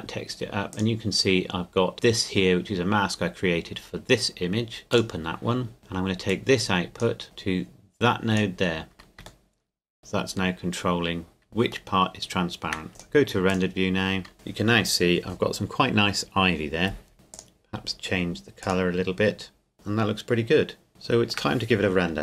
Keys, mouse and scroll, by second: 1.9-2.4 scroll up 1, 4.8 click, 6.3 click, 9.4 shift+middle click, 11.4 shift+middle click, 11.9 shift+middle click, 12.9 click, 17.3 click, 20.9 shift+middle click.